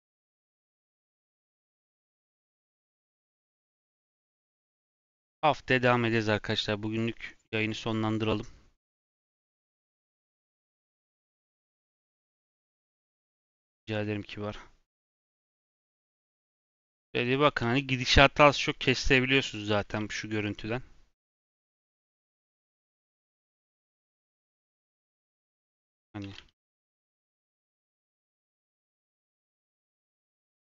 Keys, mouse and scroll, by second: 12.0-13.8 middle drag, 13.8 click, 14.3-14.9 scroll down 2, 15.8 click, 16.5 click, 16.9 scroll up 1, 17.0-19.2 shift+middle drag, 19.2-19.7 scroll up 1, 19.7-22.3 middle drag, 22.3 click, 23.1 click, 23.7 g, 24.3 shift+d, 25.7 shift+middle click, 25.9 scroll up 1, 26.2 shift+d, 27.5 shift+click, 27.8 shift+d, 27.9 x, 28.9 g, 29.6 g, 30.5 click.